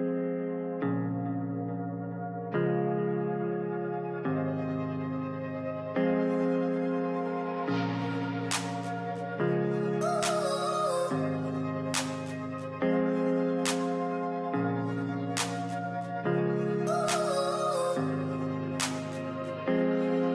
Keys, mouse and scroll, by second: 0.0-0.4 typing, 16.0-17.0 typing, 17.1 alt+scroll up 1.